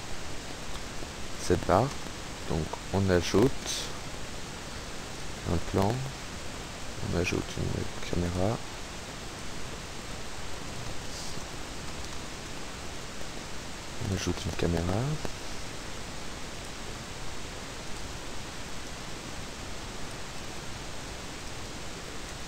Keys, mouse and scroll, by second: 3.6 shift+a, 5.2 click, 7.0 shift+a, 8.4 click, 9.4-10.4 middle drag, 10.5 x, 10.9 click, 11.3 KP_7, 12.2 a, 14.1 click, 16.7 click, 18.0 click, 18.8 KP_0, 20.2 middle click, 21.5 click.